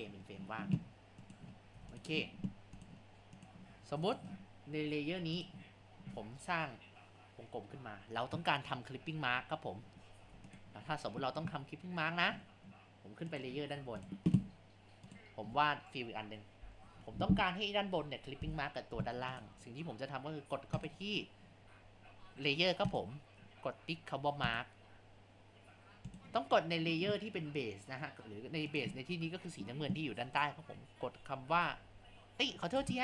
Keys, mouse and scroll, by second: 1.3 click, 1.8 Tab, 2.8 click, 3.4 click, 4.1 click, 5.4 click, 7.0 click, 10.2 Tab, 13.3 click, 13.7 Tab, 15.1 click, 16.8-18.0 drag, 18.0 Tab, 19.3 click, 20.8 click, 22.9 click, 24.5 click, 26.2 click, 28.7 click.